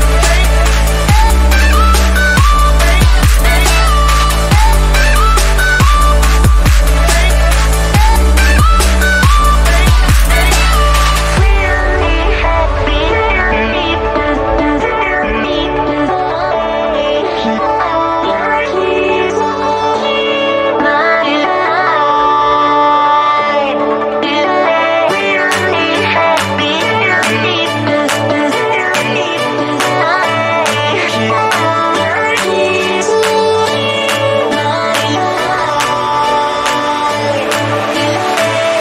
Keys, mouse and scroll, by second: 0.8 ctrl+z, 1.3 click, 10.0 ctrl+z, 10.6 click, 14.4-15.1 scroll down 1, 15.1 r, 15.4-15.7 scroll down 1, 15.7-17.1 drag, 21.4 z, 21.5 right click, 21.8 click, 22.2 r, 23.0 click, 26.7 z, 26.9 right click, 27.4 click, 34.9 click, 36.9 ctrl+click, 38.1-38.8 drag.